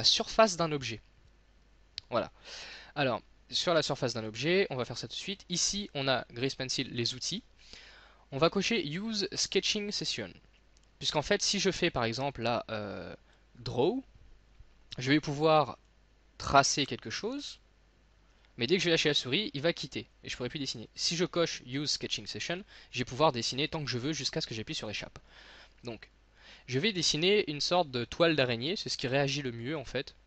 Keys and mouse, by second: 0.9-2.2 middle drag, 4.3 click, 12.0-17.5 drag, 22.5-23.7 drag, 23.7 middle click, 24.1 click.